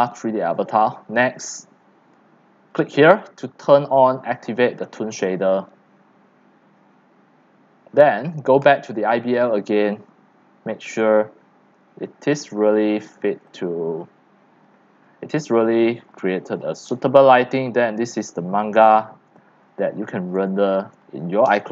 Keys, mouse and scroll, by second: 0.0-0.8 typing, 0.9-2.4 right drag, 2.7 click, 3.5 click, 4.4 click, 8.6 click, 9.8 click, 12.0 click, 12.6 middle click, 13.1 middle click, 13.4-21.7 typing, 13.6 click, 15.9 click, 16.8 click, 16.9 middle click, 18.4-19.0 scroll up 3, 20.5 click.